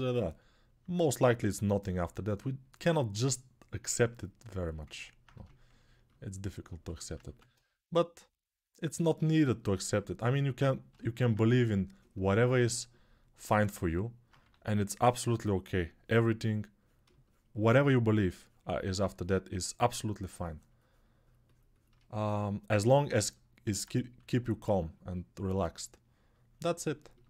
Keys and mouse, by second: 2.8-5.0 ctrl+alt+right drag, 5.0-11.1 alt+drag, 7.2 1, 11.1 shift+right click, 12.1-21.7 alt+drag, 14.2 2, 21.7 right click, 23.9 3, 26.8-27.2 alt+right drag.